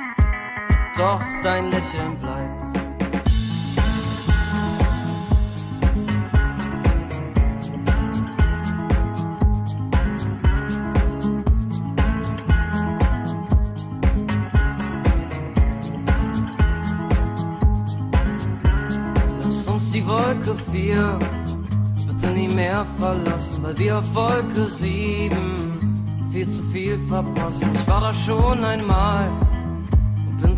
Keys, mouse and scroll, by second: 0.5-2.4 drag, 3.2 click, 14.4 Tab, 23.6 Delete, 24.9 Delete, 25.0 Delete, 26.7 Delete, 27.5 Delete, 28.1 Delete.